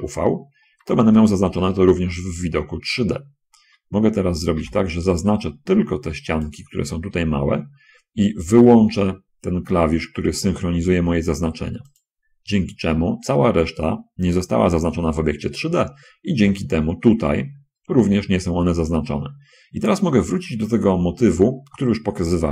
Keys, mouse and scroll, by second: 3.8 a, 4.5 b, 5.3-6.9 drag, 12.1 click.